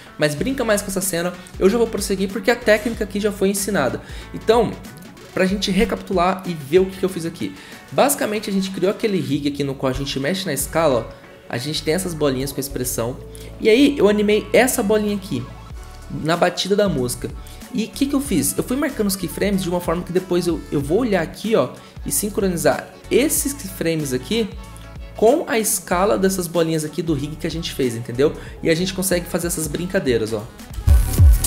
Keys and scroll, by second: 9.9 s, 12.7 ctrl+z, 30.7 0.